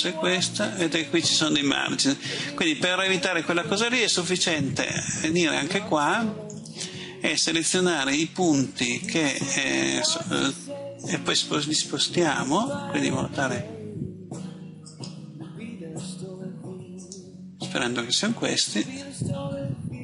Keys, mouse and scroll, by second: 8.9 right click, 11.1 g, 14.8 click, 16.9 right click, 18.5 g.